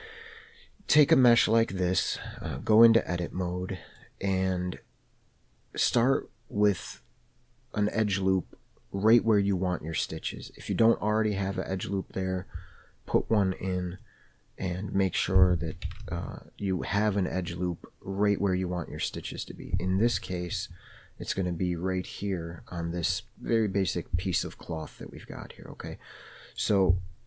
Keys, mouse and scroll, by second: 2.7 Tab, 3.7 middle click, 5.0-5.3 scroll up 1, 14.4-15.6 middle drag, 16.4 alt+z, 20.6 alt+click, 26.3 middle click.